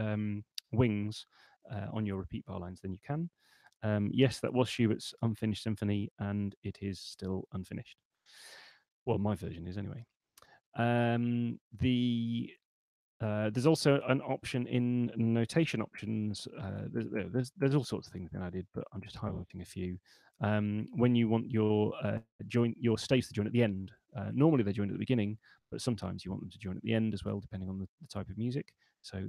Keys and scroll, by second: 15.8 shift+super+n.